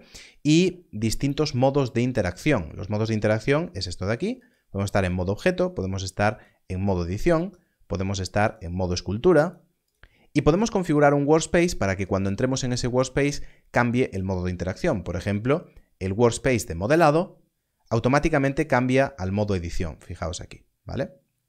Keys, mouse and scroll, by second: 4.3 click, 16.8 click.